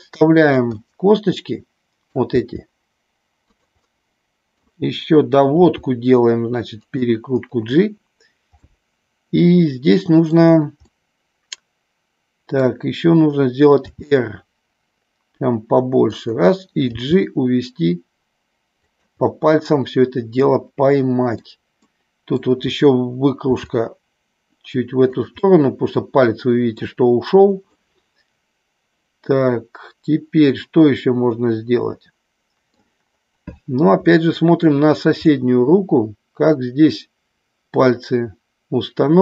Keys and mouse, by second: 0.3 click, 0.7-2.2 middle drag, 3.8 middle click, 5.7 r, 6.8 click, 8.6-10.3 middle drag, 10.9-12.7 middle drag, 13.9 r, 16.2 click, 16.9 g, 18.8 click, 19.3-21.6 middle drag, 21.8 middle click, 23.6 r, 25.0 click, 25.4-26.8 middle drag, 27.7-32.8 middle drag, 34.1 middle click, 35.3-39.2 middle drag.